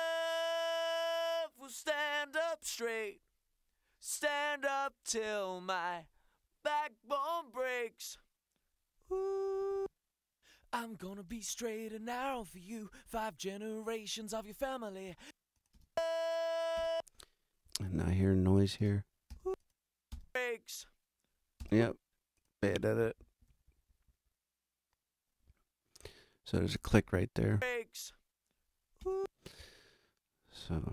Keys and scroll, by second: 9.6 space, 15.1 space, 18.8 space, 23.5 t, 27.4 space, 29.0 space.